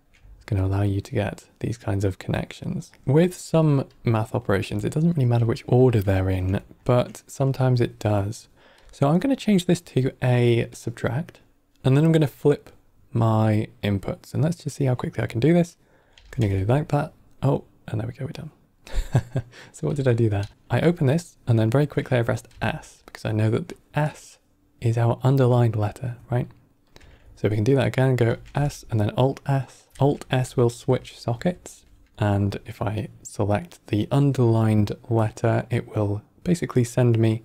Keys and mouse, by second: 0.5 click, 1.5 click, 2.3 drag, 3.0 middle click, 3.8 click, 4.9 ctrl+middle click, 5.5 middle click, 6.1 ctrl+middle click, 6.5 middle click, 8.7-9.0 drag, 10.6 click, 16.0 click, 16.3 alt+s, 19.8 click, 20.3 alt+s, 21.0 click, 23.6-26.1 drag, 26.8-27.1 drag, 28.2 click, 28.4 alt+s, 29.9 alt+s, 30.1 alt+s, 30.3 alt+s, 30.6 alt+s, 30.7 alt+s, 31.0 alt+s, 31.2 alt+s, 31.4 alt+s, 31.6 alt+s, 31.8 alt+s, 32.0 alt+s, 32.1-37.4 drag.